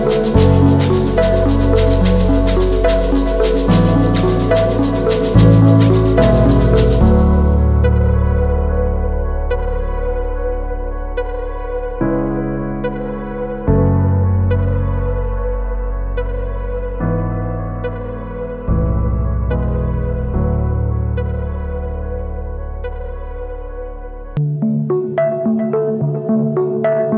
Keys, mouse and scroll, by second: 3.5 [, 4.1 double click, 9.1 double click, 21.9 double click, 23.1-24.3 typing.